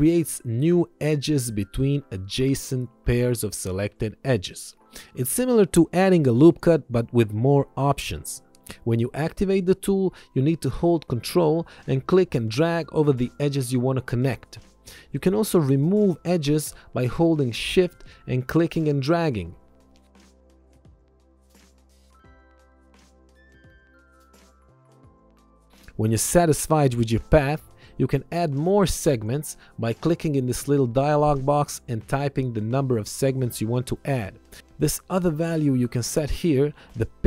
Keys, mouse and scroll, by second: 4.5 click, 12.3 ctrl+click, 18.2 ctrl+click, 20.0 click, 20.4 ctrl+click, 21.0 Return, 21.5 click, 24.3 ctrl+click, 26.6 click, 29.2 KP_2, 31.7 Return, 34.1 click.